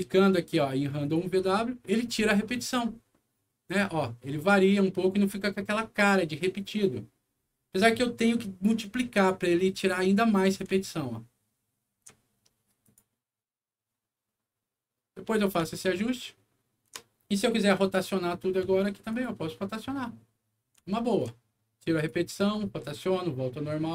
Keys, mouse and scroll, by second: 0.9 click, 3.6 click, 7.7 click, 10.7-11.9 alt+middle drag, 12.7 alt+click, 15.6-16.7 alt+middle drag, 19.0 alt+click, 20.8 alt+middle click, 21.9 alt+click.